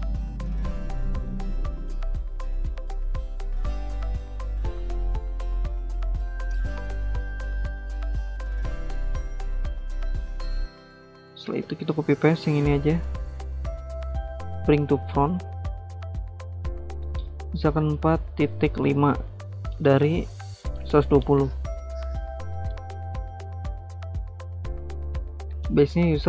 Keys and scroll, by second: 11.4 ctrl+c, 11.6 ctrl+v, 17.5-18.5 typing, 19.6-21.9 typing, 25.2-26.2 typing.